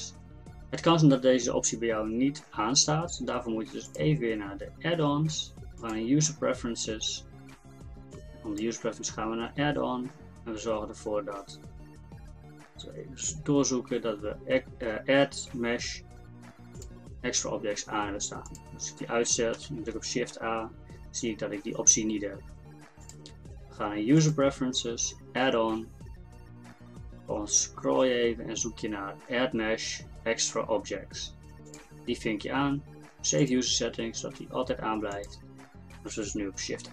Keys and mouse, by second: 3.9-7.9 drag, 19.6 shift+a, 23.0-34.6 drag.